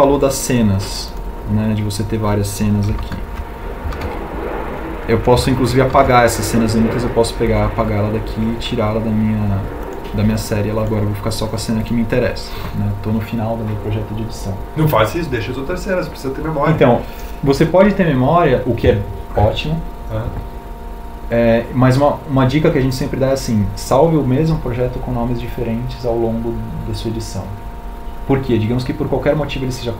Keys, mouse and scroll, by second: 3.7 shift+Tab.